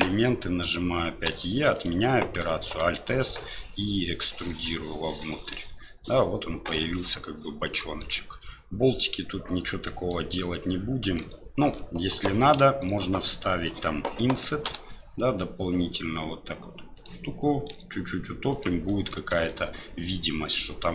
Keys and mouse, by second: 1.2 e, 2.6 alt+s, 7.0 middle click, 9.8 middle click, 11.2 alt+right click, 12.2 2, 12.8 alt+right click, 14.6 i, 17.7 e, 19.0 middle click, 19.2 Tab, 19.5-20.5 middle drag.